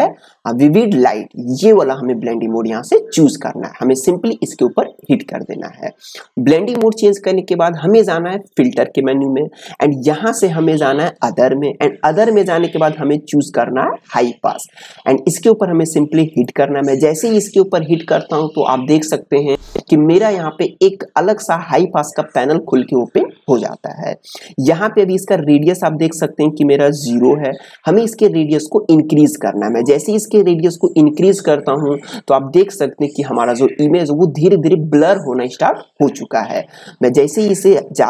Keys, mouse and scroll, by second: 5.0 click, 9.6 click, 16.3 click, 18.9-22.1 drag, 25.1 click, 31.2-34.6 drag, 36.6-38.0 drag.